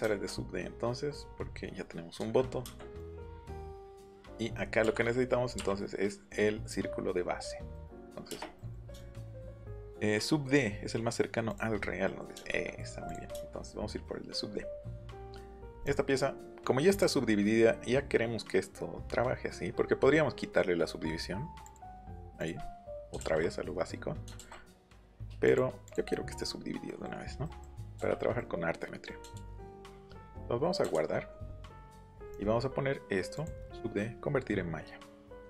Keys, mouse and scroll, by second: 1.3-2.0 scroll up 2, 2.4-2.9 scroll up 1, 2.9 click, 3.1-3.9 scroll up 1, 3.9 middle click, 4.5 middle click, 5.5 Up, 6.0 middle click, 7.7 middle click, 8.2 space, 11.4 click, 11.7 scroll up 2, 13.0 click, 14.5 scroll down 2, 15.7 right click, 16.9 right click, 21.6 click, 22.3 click, 22.5 middle click, 23.6 middle click, 24.8 middle click, 25.8 middle click, 30.9 ctrl+s, 32.2 right click, 33.3 click.